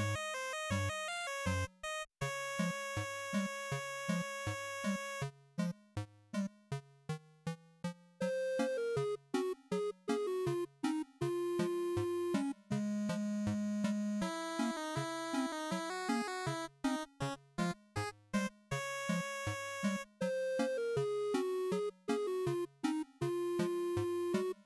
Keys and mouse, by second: 3.6-7.3 drag, 7.3 shift+d, 9.1 click, 10.4 click, 11.7-12.1 drag, 12.4 ctrl+shift+click, 14.4-15.7 drag, 19.8 click, 20.3-21.7 typing.